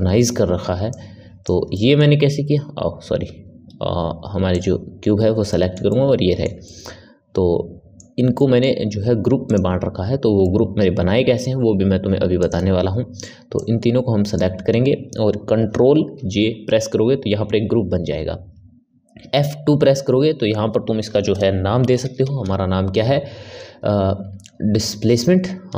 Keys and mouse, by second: 1.6-4.4 ctrl+middle drag, 4.4 click, 5.4-9.4 middle drag, 9.4 click, 10.3-12.4 middle drag, 13.5-13.8 drag, 16.1 ctrl+j, 19.4 F2.